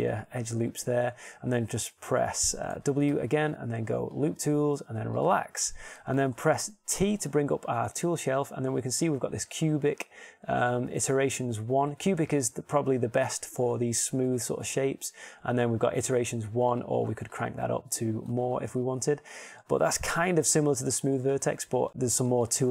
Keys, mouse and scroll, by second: 4.4 w, 8.1 t, 17.9-19.9 drag, 20.7 middle click, 22.0-22.5 shift+scroll.